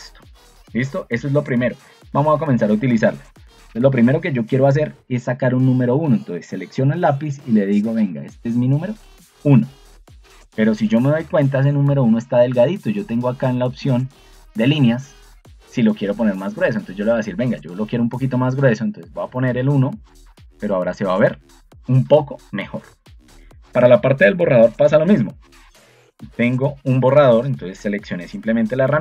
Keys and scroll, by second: 1.9 Escape, 11.3 ctrl+2, 16.7 Escape, 27.8 ctrl+2.